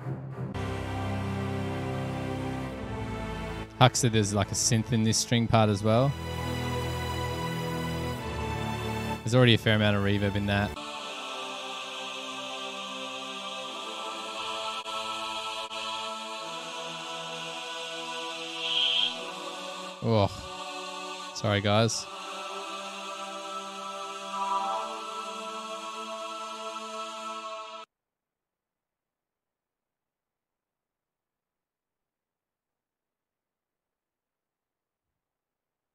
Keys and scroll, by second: 28.0 space, 28.2 space, 34.0 super+=.